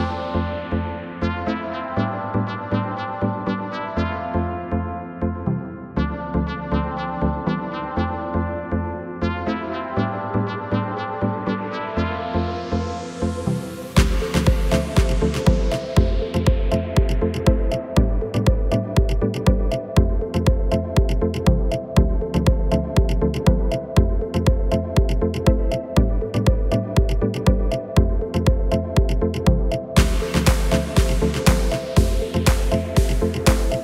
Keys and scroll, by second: 18.0 KP_7, 19.8 s, 20.3 x.